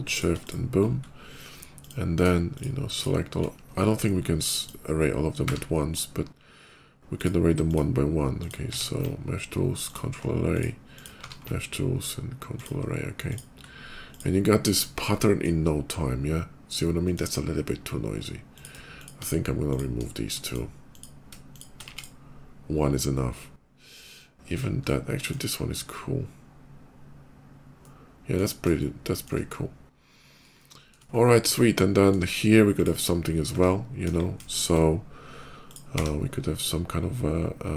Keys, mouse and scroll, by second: 0.0 shift+click, 0.2 shift+click, 0.8 shift+click, 1.6 shift+click, 2.3 shift+click, 2.8 shift+click, 3.6 shift+middle click, 3.8 shift+middle click, 4.3 shift+click, 5.3 q, 7.0 ctrl+click, 8.2 ctrl+click, 8.5 q, 9.1 ctrl+q, 9.7 ctrl+click, 10.4 ctrl+click, 10.8 ctrl+click, 11.0 q, 11.6 ctrl+q, 13.1 ctrl+click, 13.9 ctrl+click, 14.2 ctrl+middle click, 14.6 shift+middle click, 15.0 shift+middle click, 16.4 shift+middle click, 16.7 shift+middle click, 18.2 click, 18.8 shift+click, 19.5 shift+click, 20.1 shift+click, 20.7 shift+click, 21.2 shift+click, 21.6 x, 21.8 click, 24.7 middle click, 27.6 middle click, 28.6 shift+middle click, 29.3 shift+middle click, 29.9 shift+middle click, 30.4 shift+middle click, 31.0 shift+middle click, 31.1 shift+middle click, 31.4 shift+middle click, 32.6 shift+click, 33.9 KP_5, 34.2 shift+middle click, 34.6 middle click, 35.5 click, 35.8 d.